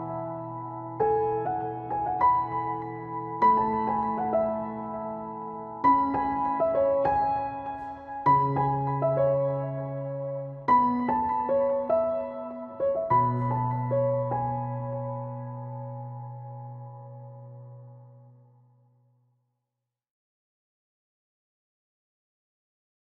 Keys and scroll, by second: 1.4 Tab, 1.5 Return, 3.3 ctrl+s, 10.7 ctrl+s, 11.4 alt+/, 11.9 ctrl+s, 12.2 Return, 13.0 ctrl+space, 14.2 Return, 19.2 Delete, 21.9 alt+/, 22.0 ctrl+s.